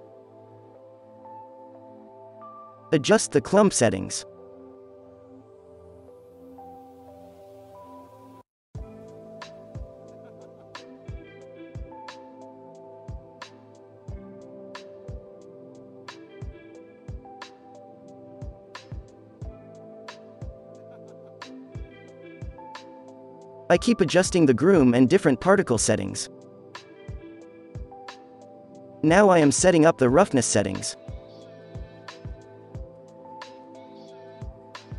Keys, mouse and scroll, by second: 4.4 click, 6.1-8.0 drag, 11.1 f, 16.3-17.8 drag, 19.9-20.8 drag, 22.9 click, 23.8 ctrl+s, 25.3 alt+a, 28.7-34.9 drag.